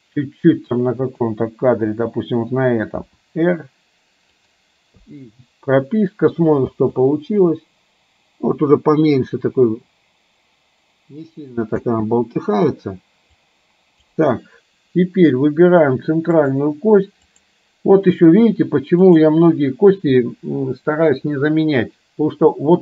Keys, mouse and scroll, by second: 1.2 click, 3.2 r, 5.1 i, 6.8 space, 11.9 space, 13.4-14.2 drag.